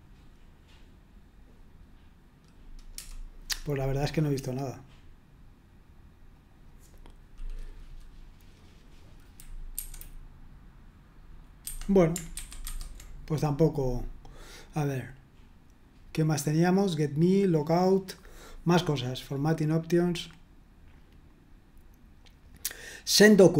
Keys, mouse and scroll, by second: 3.0 Return, 4.2 click, 6.3 click, 9.7 F5, 11.6 Escape, 12.3 super+1, 12.7 super+2, 23.2 click.